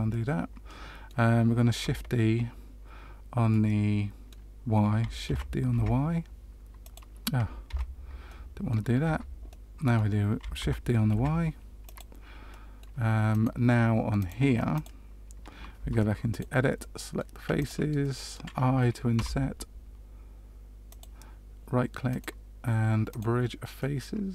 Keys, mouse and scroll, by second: 0.0 middle click, 3.4 middle click, 5.2 shift+d, 7.6 ctrl+z, 8.2 middle click, 9.0 Tab, 9.4 middle click, 10.5 shift+d, 12.4 middle click, 13.3 right click, 14.7 click, 15.7 Tab, 16.2 click, 16.7 middle click, 17.5 shift+click, 18.0 middle click, 19.1 i, 22.0 right click, 23.7 middle click.